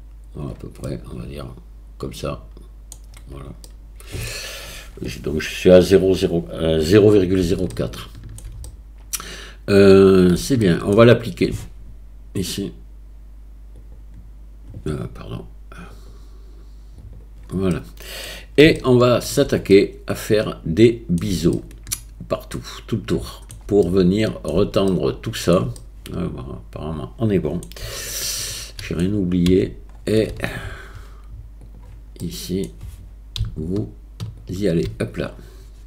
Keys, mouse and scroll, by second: 0.9-2.9 middle drag, 3.7 middle click, 4.2 click, 4.2 right click, 7.8-8.4 shift+middle drag, 8.7-10.4 drag, 8.7-10.4 middle drag, 8.7-10.4 right drag, 10.6-10.9 shift+middle drag, 13.9-14.7 drag, 16.0-17.2 drag, 17.7-18.2 drag, 17.7-18.2 middle drag, 17.7-18.2 right drag, 18.8-19.3 shift+middle drag, 19.7-21.2 middle drag, 21.6-21.9 shift+middle drag, 22.6-23.5 shift+middle drag, 23.9-24.4 middle drag, 24.9-25.5 shift+middle drag, 25.8-27.6 middle drag, 28.1-28.9 shift+middle drag, 29.5 Tab, 32.2 middle click, 34.5 alt+click.